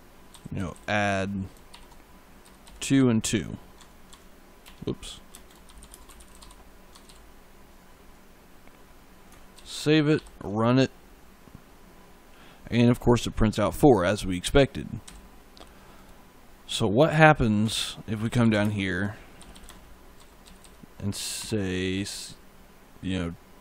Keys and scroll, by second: 0.4 p, 1.6 shift+9, 2.3 2, 3.6 Tab, 4.5-6.9 typing, 6.8 Tab, 9.4 ctrl+s, 10.0 ctrl+F5, 14.9 e, 17.5 Return, 17.8-21.2 typing, 23.5 2.